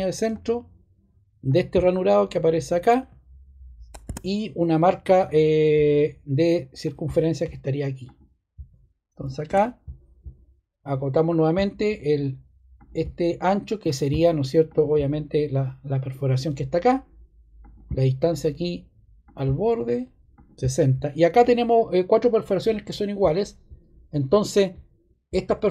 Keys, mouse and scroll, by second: 4.0 ↺, 6.8 typing, 9.4 ↶, 17.5 click, 19.2 click, 20.0 typing.